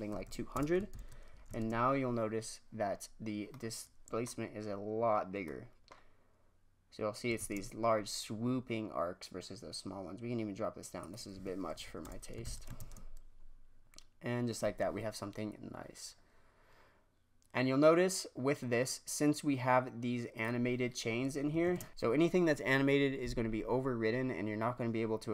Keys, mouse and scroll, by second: 0.2 KP_0, 0.8 shift+Left, 1.4 shift+space, 2.9-3.5 scroll down 3, 3.6-7.4 middle drag, 7.4 shift+space, 10.9 click, 11.8 KP_0, 12.4 shift+Left, 12.8 shift+space, 20.5 click, 21.7 shift+space, 21.9 middle click.